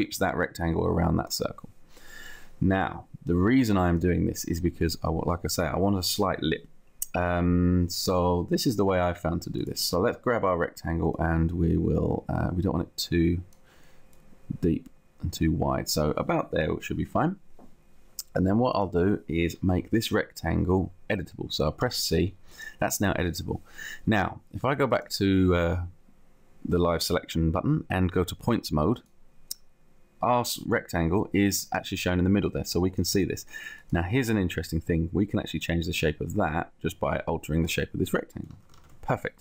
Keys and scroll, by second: 21.7 c, 38.7 ctrl+z.